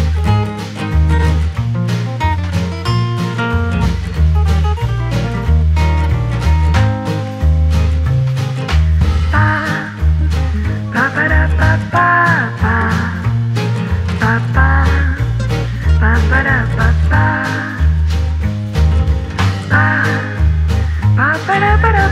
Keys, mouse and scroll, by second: 0.2 n, 0.7 space, 2.6 click, 3.5 click, 5.9 space, 6.8 Left, 7.4 click, 8.1-10.3 scroll down 8, 10.3 click, 12.1-13.7 drag, 13.8-17.0 drag, 17.0 g.